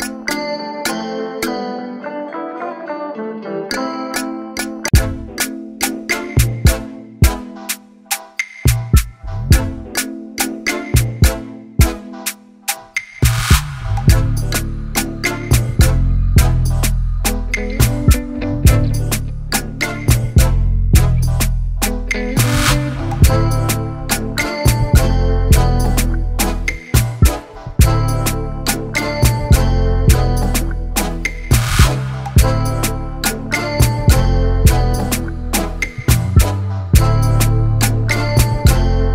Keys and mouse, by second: 0.0 click, 1.6 click, 2.0 click, 2.5 click, 3.1 click, 4.2 click, 6.5 click, 7.0 click, 8.3 click, 9.1 shift+click, 10.0 click, 15.3 click, 16.4 click, 17.9 click, 19.4 click, 22.3-28.3 typing, 29.9 click, 29.9 typing, 30.4 ctrl+t, 32.1 click, 33.8 click, 35.4 Return, 36.9 ctrl+y.